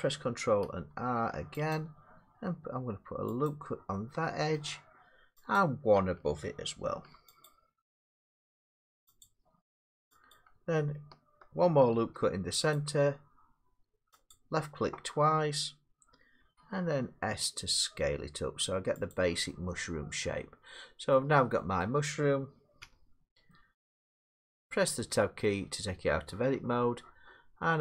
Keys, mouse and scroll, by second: 0.9 ctrl+r, 1.7 click, 3.5 click, 4.6 middle click, 5.6 click, 6.9 ctrl+r, 7.5 click, 9.2 click, 10.3 click, 12.0 ctrl+r, 12.8 click, 14.3 click, 16.4 s, 19.1 click, 19.7 middle click, 21.1 middle click, 21.8 middle click, 22.8 Tab, 25.4 middle click.